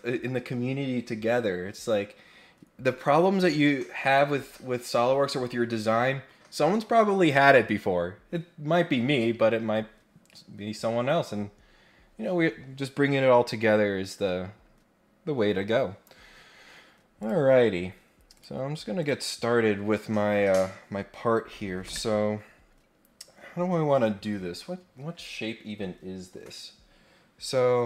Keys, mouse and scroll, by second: 17.2 click, 18.3 click, 19.0 click.